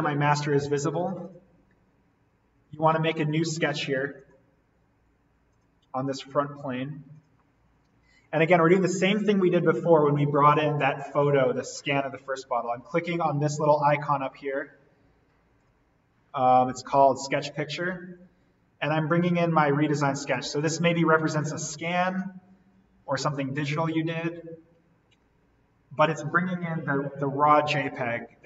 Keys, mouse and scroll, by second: 1.2 click, 11.6-15.6 drag, 20.1 click, 26.8-27.2 scroll up 1, 28.0-28.4 scroll down 1.